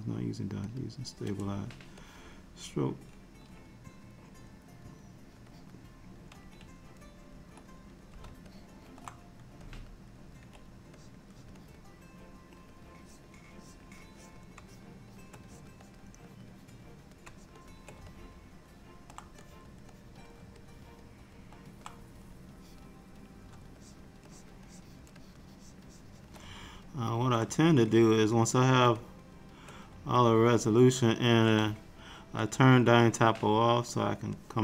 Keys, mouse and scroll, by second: 0.8 click, 1.4 n, 2.1 click, 4.5 click, 5.4 click, 8.6 ctrl+middle click, 9.7 click, 11.1 click, 11.4 click, 11.7 click, 12.7 click, 13.1 click, 13.7 click, 14.2 click, 14.7-15.3 shift+click, 15.2 click, 15.6 click, 15.9 click, 16.4-17.1 click, 16.9 click, 16.9 click, 17.4 shift+click, 17.7 shift+click, 18.2 middle click, 19.5 click, 20.0 click, 20.7 middle click, 22.7 click, 23.9 ctrl+click, 24.4 ctrl+click, 24.8 ctrl+click, 25.3 click, 25.5 ctrl+click, 26.0 ctrl+click, 26.7 middle click, 28.0 click, 28.3 click, 29.1 click, 30.2 middle click, 30.9 middle click, 32.6 click, 34.4 click.